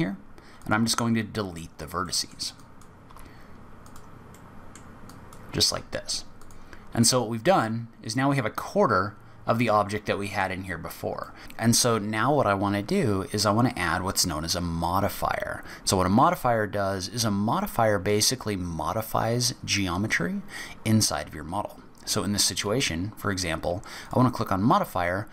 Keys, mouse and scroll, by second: 1.2 click, 2.0 middle click, 2.6 click, 3.0 x, 4.3 middle click, 5.1 click, 5.7 x, 6.9-8.7 scroll up 5, 7.6 middle click, 10.8-11.4 scroll up 2, 11.2 middle click, 11.4-11.8 scroll down 3, 24.0 click.